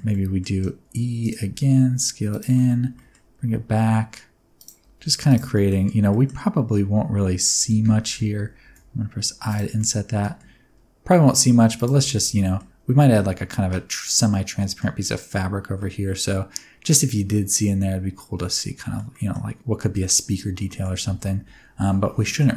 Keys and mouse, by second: 0.1 middle click, 0.8 e, 1.2 click, 1.5 s, 2.3 click, 2.5 middle click, 2.9 g, 4.5 click, 4.8 s, 5.2 click, 5.6 middle click, 6.2 middle click, 7.6 f, 8.7 i, 9.5 click, 10.1 g, 11.7 click, 11.9 Tab, 12.0 middle click, 14.3 middle click, 15.8-18.9 middle drag, 19.1 middle click, 20.0 middle click, 21.0 alt+a, 21.2-22.4 middle drag.